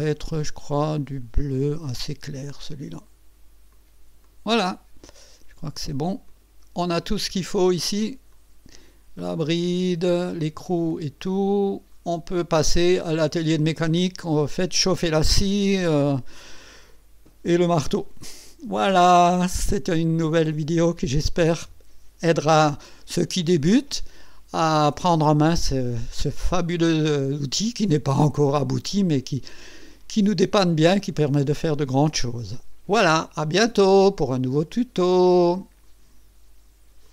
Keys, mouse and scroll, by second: 0.3 click, 2.7 click, 3.7 click, 4.2 click, 6.3 click, 6.9 click, 6.9 middle click, 7.9 scroll down 2, 8.3-10.0 drag, 10.8-12.0 drag, 12.5 scroll up 1, 13.0 right click, 24.2-29.6 drag, 29.9 right click, 30.9 right click, 30.9 click.